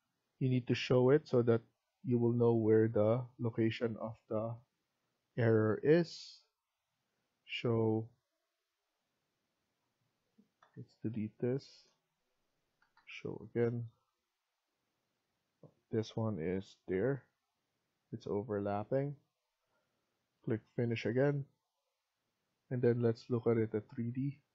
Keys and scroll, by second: 8.7 Escape, 10.5 Delete, 12.7 ctrl+z, 16.4-17.4 typing.